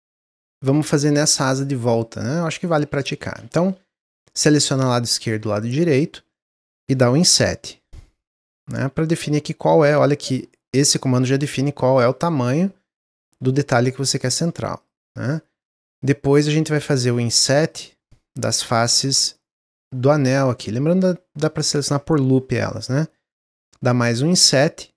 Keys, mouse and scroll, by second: 1.0 Tab, 1.3 middle click, 1.8 click, 2.3 middle click, 3.0 shift+click, 3.5 shift+middle click, 3.8-4.1 scroll up 2, 4.6-7.2 middle drag, 7.2 i, 12.2-14.7 middle drag, 14.7 click, 15.2 shift+click, 15.6 shift+click, 15.9 shift+click, 16.3 shift+click, 16.6 shift+click, 16.9 middle click, 17.1-17.6 scroll up 1, 17.6 shift+click, 18.3 shift+click, 18.7 shift+click, 19.5 shift+click, 20.3 shift+click, 20.6-24.0 middle drag, 24.0 i.